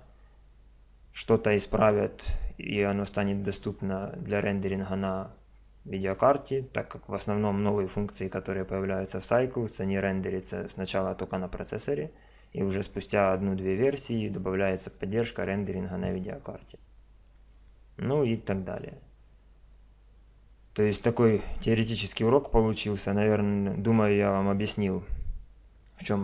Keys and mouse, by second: 3.5 click.